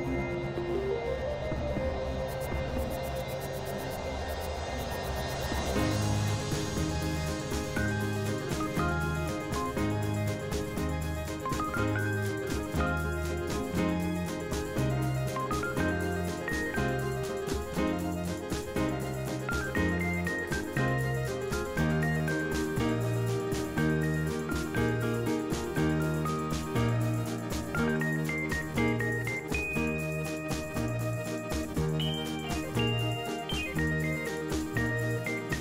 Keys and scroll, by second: 18.1 ctrl+z.